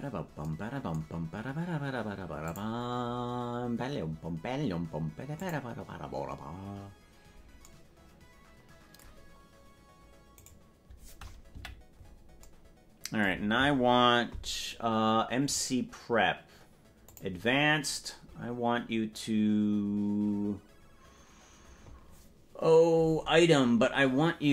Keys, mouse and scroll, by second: 4.3 click, 6.1 click, 10.7 right click, 11.7 KP_Decimal, 15.3-15.9 scroll down 12, 17.1 click, 17.9-18.7 scroll down 4.